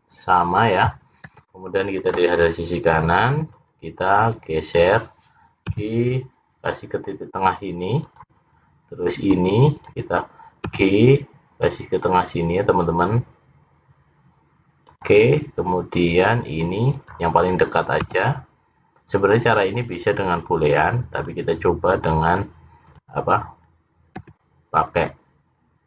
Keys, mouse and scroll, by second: 3.2 click, 4.2 click, 5.8 g, 9.4 click, 10.7 g, 16.7 click, 18.1 g, 22.5 click, 24.3 g.